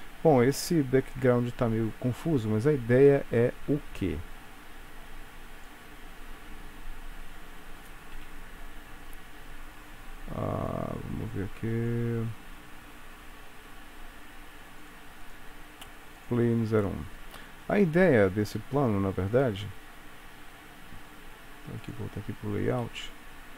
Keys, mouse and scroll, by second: 1.0 ctrl+s, 2.7-3.9 scroll down 7, 3.9 scroll up 1, 4.0-5.7 scroll down 2, 5.7 click, 5.7 scroll down 1, 6.8-8.3 scroll down 4, 7.6-8.3 scroll up 1, 8.3 scroll up 4, 8.3 KP_Decimal, 10.8 click, 15.0 click, 15.4 click, 16.4 click.